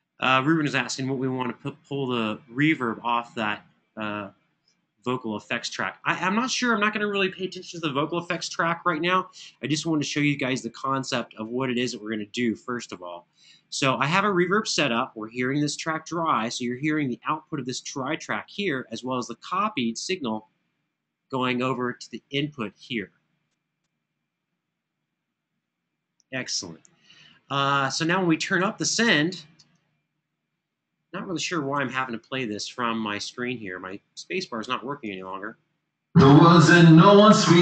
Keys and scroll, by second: 29.3 space, 31.7 super+=, 36.3 super+=.